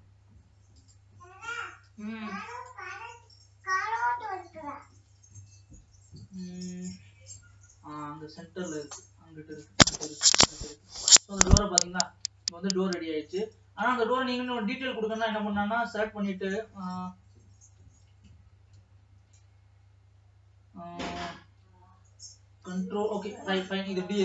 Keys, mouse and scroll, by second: 1.2 scroll down 2, 2.0 click, 3.3 scroll up 2, 4.1 scroll down 1, 5.6-7.1 shift+middle drag, 7.1-7.9 scroll up 1, 7.9 middle click, 8.5-9.4 scroll up 7, 9.4-10.1 scroll down 2, 10.1 scroll down 1, 10.6-12.2 shift+middle drag, 12.2 click, 12.7 Tab, 14.0 e, 18.0 ctrl+z, 21.6 ctrl+r.